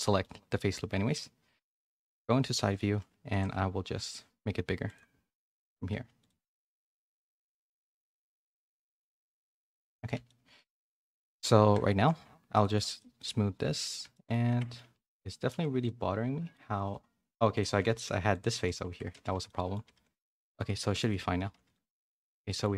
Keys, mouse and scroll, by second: 0.0 middle click, 0.5 middle click, 2.1 KP_3, 2.7 z, 3.3 alt+s, 5.1 z, 6.0 Tab, 7.2 Tab, 8.2 alt+s, 9.7 Tab, 9.9 a, 10.1 a, 10.2 middle click, 10.9 middle click, 11.7 a, 11.8 shift+middle click, 12.7 right click, 13.1 middle click, 14.1 shift+middle click, 14.5 Tab, 14.8 z, 15.0 middle click, 15.5 3, 15.8 middle click, 16.7 3, 17.5 click, 17.8-20.0 typing, 18.9 Tab, 19.4 middle click, 20.3 middle click, 20.9 middle click, 21.3 a, 21.5 a, 21.7 middle click, 22.4 middle click.